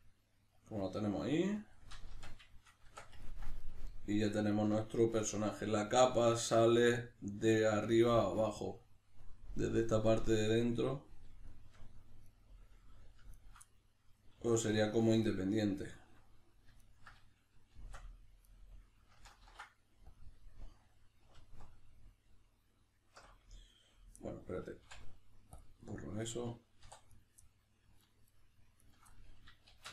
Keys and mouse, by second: 0.0-2.2 middle drag, 2.2 b, 2.5-12.3 shift+middle drag, 2.9 Tab, 12.3 right click, 13.3 ctrl+right click, 13.6 middle click, 14.5 shift+right click, 15.2 right click, 16.8 ctrl+right click, 17.7 shift+d, 18.5 right click, 19.4 ctrl+e, 20.5-27.1 middle drag, 21.4 alt+q, 24.8 x, 26.8 3, 27.1 right click, 27.4-28.0 middle drag, 28.0 ctrl+right click, 28.3 ctrl+right drag, 28.8 ctrl+right click, 29.1-29.9 middle drag, 29.7 shift+d.